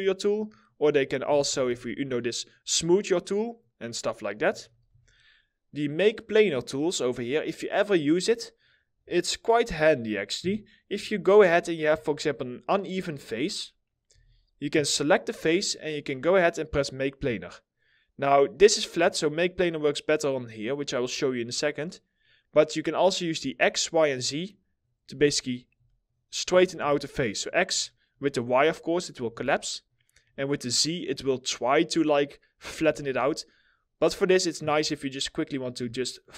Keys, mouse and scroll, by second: 0.1 middle click, 0.9 ctrl+z, 2.8 double click, 4.1 ctrl+z, 5.1 scroll down 1, 8.0 middle click, 8.4 scroll up 1, 9.5 middle click, 10.0 2, 11.1 alt+middle click, 13.7 4, 18.7 middle click, 25.0 middle click, 26.4 ctrl+z, 27.4 alt+middle click, 28.9 ctrl+z, 30.1 alt+middle click, 32.6 ctrl+z.